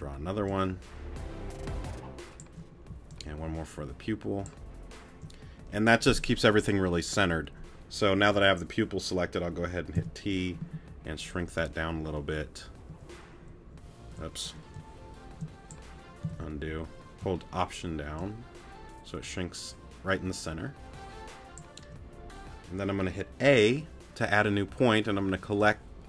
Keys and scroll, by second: 9.9 t, 23.6 a.